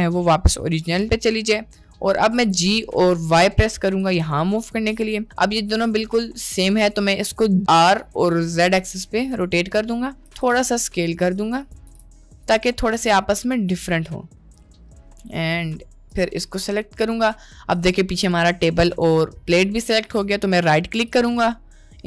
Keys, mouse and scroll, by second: 1.1 middle click, 2.4 g, 5.7-6.5 middle drag, 7.6 r, 10.4 s, 11.8 g, 12.8 drag, 13.2-14.6 middle drag, 15.0 middle click, 16.2-17.3 drag, 21.3-22.0 ctrl+drag.